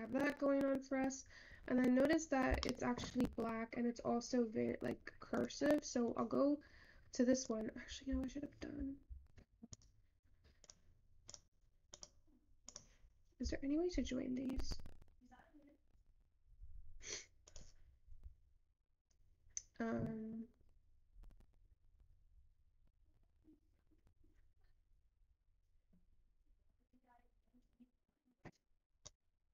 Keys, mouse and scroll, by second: 2.9-6.2 shift+middle drag, 6.2 click.